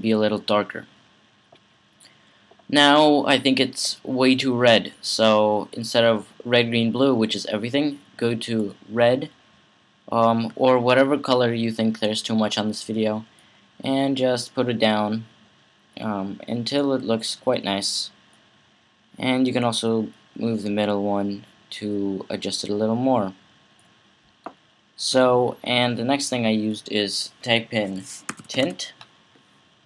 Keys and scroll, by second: 27.9-28.9 typing.